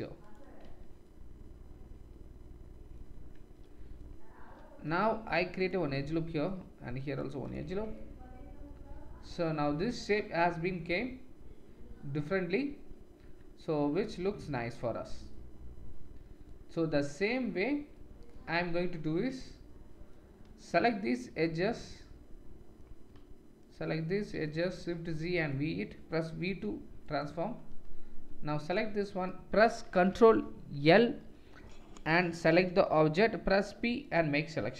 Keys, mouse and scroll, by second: 0.7 Tab, 1.6 click, 1.7-3.1 middle drag, 3.1 Tab, 4.9 ctrl+r, 6.9 ctrl+r, 7.7 Tab, 10.0-10.5 middle drag, 10.5 drag, 10.7-15.6 middle drag, 13.2 Tab, 13.8 Tab, 18.6 Tab, 20.8 alt+click, 22.0 middle click, 24.3 click, 24.7 shift+z, 26.5 v, 31.1 ctrl+l, 33.5 p, 34.6 Tab.